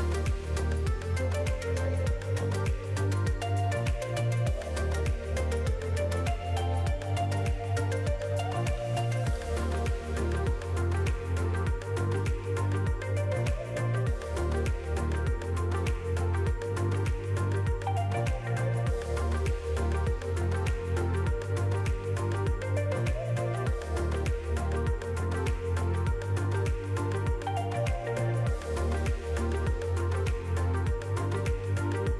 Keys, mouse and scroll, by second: 0.7 click, 1.1 s, 2.5-3.3 scroll up 3, 2.7 middle click, 3.3 shift+middle click, 3.4 middle click, 3.9 3, 4.3 click, 4.6 middle click, 5.5 s, 8.0 alt+click, 8.4 middle click, 9.7 g, 13.7 middle click, 14.7 Tab, 15.0 middle click, 15.5 click, 17.1 middle click, 17.9 click, 18.7 middle click, 19.4 click, 20.1 middle click, 20.7 scroll up 3, 20.9 shift+middle click, 21.4 r, 23.5 middle click, 24.4 click, 25.0 middle click, 25.7 click, 26.2-26.7 scroll down 4, 26.5 alt+a, 27.1 click, 27.4 scroll up 3, 28.4 s, 29.7 click, 31.2 r.